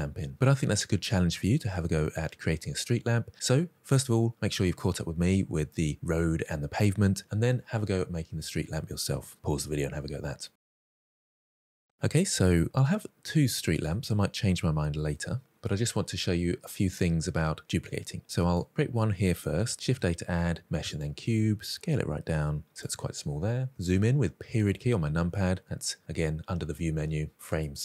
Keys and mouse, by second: 12.8-13.9 middle drag, 14.4-15.1 shift+middle drag, 18.4 shift+right click, 19.8 shift+a, 21.5 s, 22.7 click, 23.6 KP_Decimal, 24.6-25.0 middle drag, 25.6-27.8 drag.